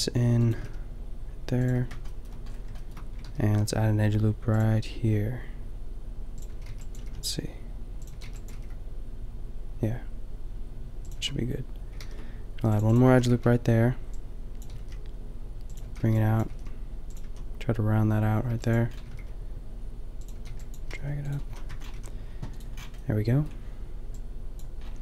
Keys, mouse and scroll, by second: 0.5 g, 1.8 a, 3.3 ctrl+r, 6.5 a, 6.8 b, 6.9 g, 8.1 a, 8.3 b, 8.6 g, 11.2 a, 12.0 ctrl+r, 13.1 a, 13.3 b, 14.7 g, 15.8 a, 16.0 b, 16.4 g, 17.2 a, 18.6 b, 19.0 middle click, 19.2 g, 20.3-21.9 typing, 21.7 Tab, 24.9 a.